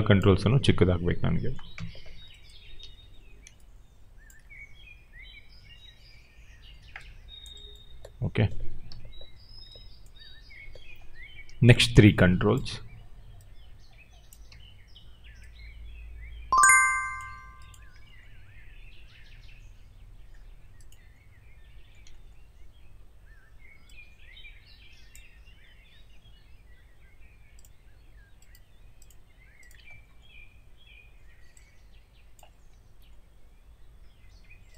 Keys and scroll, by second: 1.7 4, 2.7 r, 8.8 6, 14.4 w.